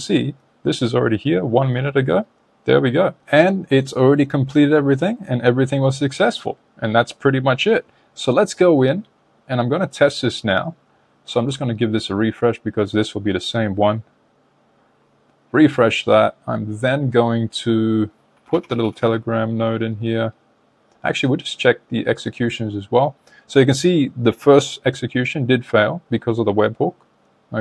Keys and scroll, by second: 11.1 super+r.